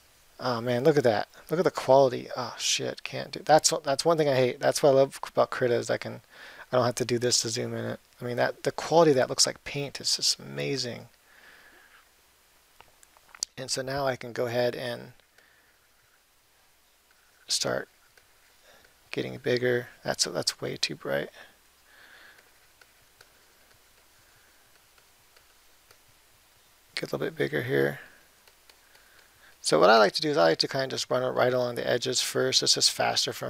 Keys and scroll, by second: 16.9 ], 26.4 ].